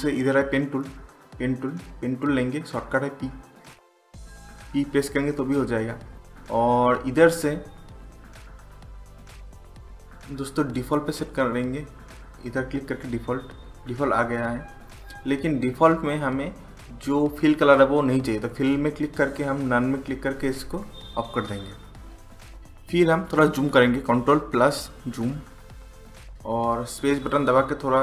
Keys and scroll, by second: 4.6 typing, 24.6 ctrl+=, 25.0 ctrl+=.